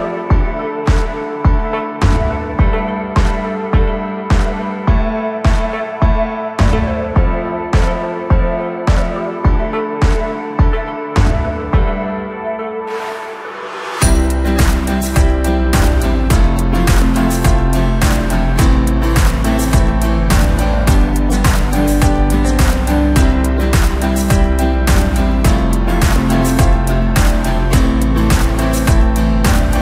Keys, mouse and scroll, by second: 0.1 click, 2.1 shift+click, 3.0 shift+click, 3.9 KP_1, 5.1 KP_Decimal, 5.7-6.8 scroll down 8, 6.8 g, 8.4-9.7 middle drag, 9.7 shift+click, 10.6 KP_1, 11.1 g, 12.4-13.4 middle drag, 13.4 shift+click, 14.2 KP_1, 14.6 g, 16.0-17.0 middle drag, 17.0 shift+click, 17.8 KP_1, 18.3 g, 20.2-22.7 middle drag, 22.7 click, 23.4 KP_1, 23.8 g, 25.6 scroll down 2, 25.8-27.2 middle drag, 27.2 Tab, 27.4 scroll down 4, 27.6-29.2 middle drag, 29.2 drag.